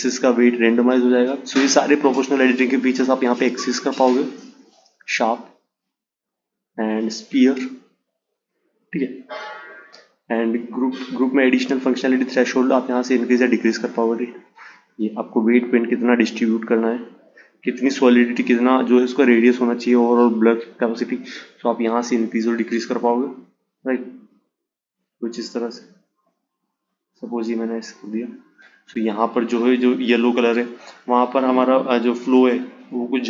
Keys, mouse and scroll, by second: 0.1 click, 0.8-3.9 drag, 4.4-7.4 drag, 8.4 click, 9.0 click, 10.5-13.5 drag, 18.3-21.4 drag, 21.5-24.5 drag.